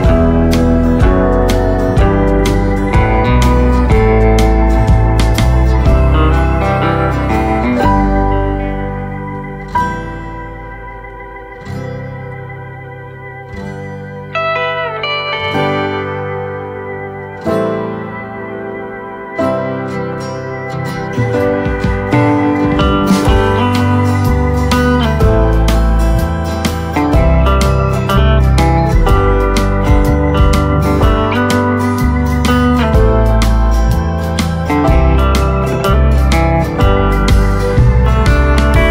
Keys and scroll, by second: 4.0 ctrl+z, 10.1 ctrl+z, 13.4 ctrl+z, 17.2 space, 17.6 space, 23.4 ctrl+z, 25.8 ctrl+z, 30.2 space, 32.5 space, 33.5 ctrl+space, 34.3 ctrl+z.